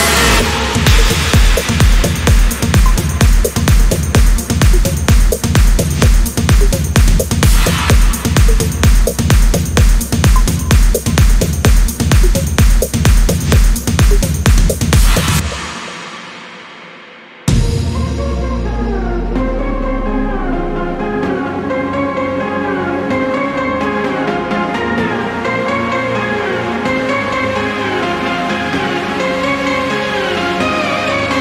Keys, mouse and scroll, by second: 1.0 scroll down 2, 1.4 scroll up 1, 2.2 click, 3.3 click, 5.2-6.2 scroll up 2, 6.3-6.8 scroll up 1, 8.6 click, 9.6-10.0 scroll down 1, 11.0 scroll down 2, 11.2-11.6 scroll up 2, 12.0 scroll down 1, 15.6 click, 17.4 scroll down 1, 17.9 scroll up 1, 20.5 click, 21.2 scroll down 1, 23.0 ctrl+click, 23.6 ctrl+click, 25.8 ctrl+click, 28.5 ctrl+click, 30.7 ctrl+click, 31.3 ctrl+scroll down 2.